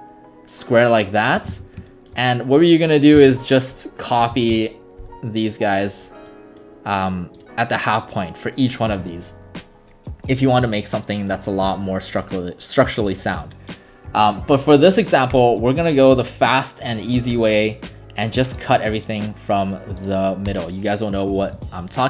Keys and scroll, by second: 1.5 ctrl+alt+s, 2.9-4.7 typing, 8.9 Escape, 9.0 Escape, 14.1 Delete, 15.3 Delete, 17.3 Delete, 20.5 Delete.